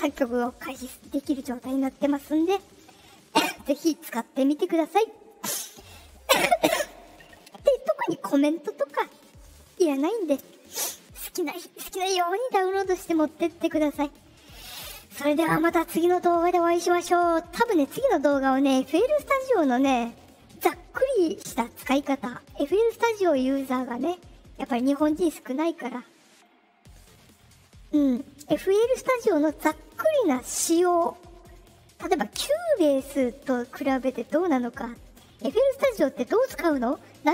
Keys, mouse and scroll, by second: 6.1 click.